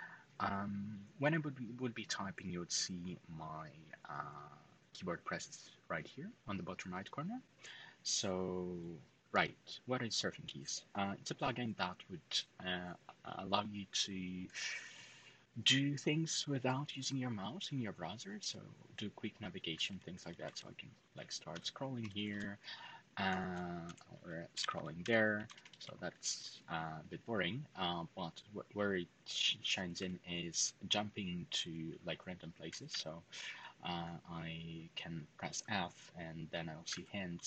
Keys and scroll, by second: 18.6-19.9 typing, 21.0-26.0 typing, 29.7 typing, 32.2-33.1 typing, 36.5-37.2 typing.